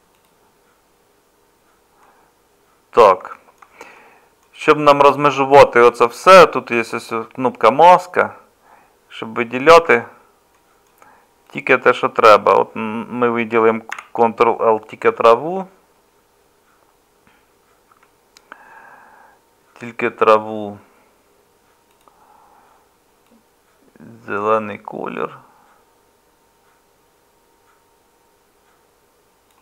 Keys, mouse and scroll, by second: 9.9 Tab, 13.9 ctrl+l, 17.9 Tab.